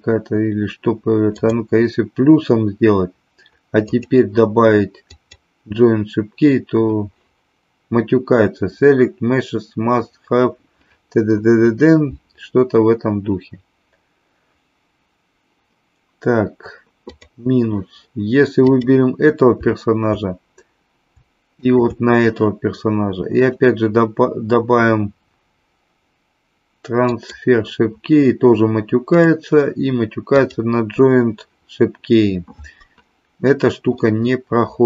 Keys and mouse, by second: 1.3 click, 4.0-5.2 drag, 17.1 click, 21.7 shift+click, 23.3-27.8 drag, 29.0-30.5 drag, 34.1-34.8 middle drag.